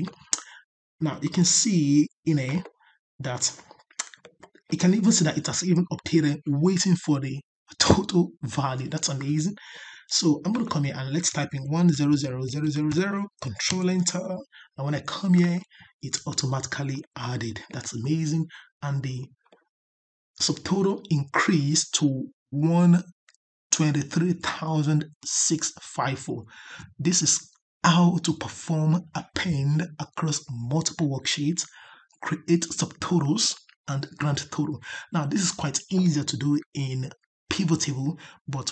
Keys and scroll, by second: 13.6 ctrl+Return.